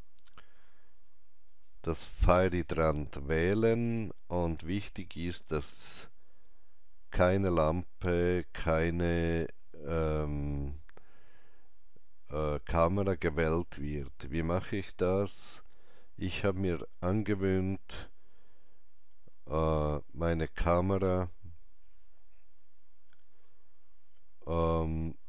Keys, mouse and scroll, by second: 1.5 Return, 1.5 click, 1.5 typing, 3.9 scroll down 1, 4.9 scroll down 1, 7.5-8.4 scroll down 1, 9.6 shift+middle click, 11.7 scroll down 1, 13.9 scroll up 1, 14.7 scroll up 1, 19.6 Tab, 19.6 scroll up 1, 23.3 Tab, 23.3 click, 23.3 scroll up 1.